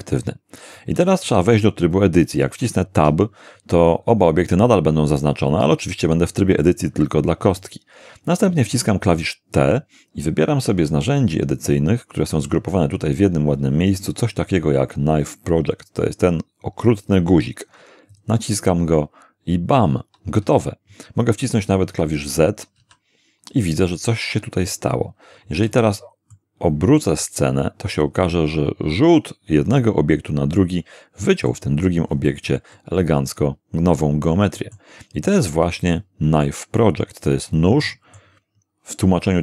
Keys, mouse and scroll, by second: 3.0 Tab, 8.7 t, 10.9-12.6 drag, 18.1 click, 22.8 z, 25.7 z, 26.3-31.7 middle drag, 32.1 scroll up 1, 32.7-34.9 middle drag, 35.2-38.4 middle drag.